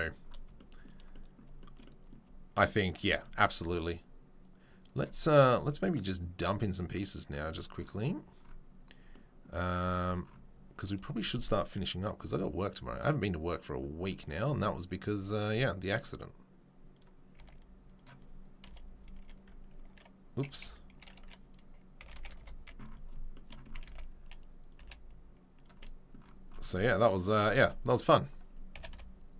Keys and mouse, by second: 4.5 click, 4.8-17.0 right drag, 17.0-19.0 middle drag, 17.4 s, 18.6 KP_3, 19.1 ctrl+KP_1, 20.6 KP_1, 22.0 r, 23.1-23.5 shift+middle drag, 23.8 s, 24.8 g, 25.5-26.9 middle drag, 27.6 shift+middle drag, 28.7 g.